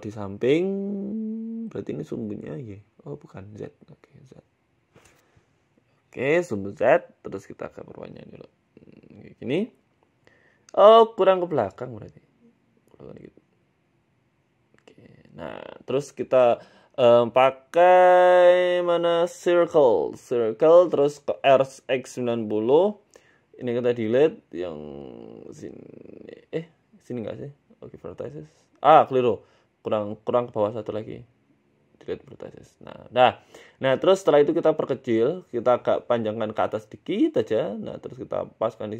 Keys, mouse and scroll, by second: 1.4 g, 2.8 click, 3.1 click, 4.1 click, 4.6 scroll down 2, 4.9 scroll down 1, 5.4 shift+middle click, 5.8 g, 6.8 click, 7.6 g, 8.7 Tab, 8.9-9.3 scroll down 5, 9.1 middle click, 10.0 scroll up 2, 10.2 middle click, 10.6 KP_1, 10.9 Tab, 11.7 click, 12.7 g, 14.2 Tab, 14.4 middle click, 14.9-15.4 scroll down 4, 15.1 middle click, 15.4 KP_1, 17.0 shift+a, 20.8 r, 22.1 s, 22.8 Tab, 23.3 click, 27.3 Delete, 30.1 ctrl+z, 31.1 click, 32.2 Delete, 34.0 Tab, 34.3 s, 35.5 s, 36.4 g, 37.3 s.